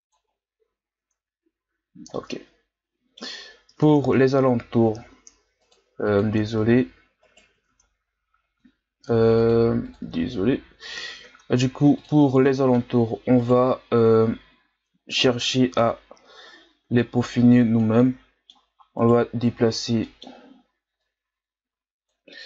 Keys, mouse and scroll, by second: 0.2-1.0 scroll down 5, 1.0 Tab, 2.1-3.4 middle drag, 3.4-4.0 scroll up 2, 4.0 ctrl+Tab, 5.6-7.2 drag, 7.2 right click, 7.9 ctrl+Tab, 9.3-10.7 drag, 10.7 Tab, 11.2 ctrl+Tab, 12.5 middle click, 13.4 right click, 14.3-15.2 scroll down 1, 15.2 KP_1, 16.1-17.0 scroll up 2, 17.0 click, 18.0-19.0 middle drag, 19.0 right click, 19.8 scroll down 1, 20.0-21.0 middle drag, 21.0-22.3 drag, 22.3-22.4 middle drag.